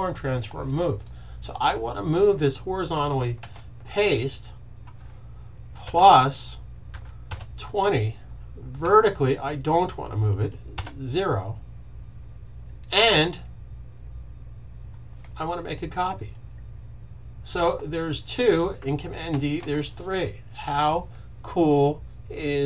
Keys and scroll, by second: 3.3 super+v, 5.8 typing, 6.8-7.2 typing, 10.5-11.2 typing, 19.2 super+d.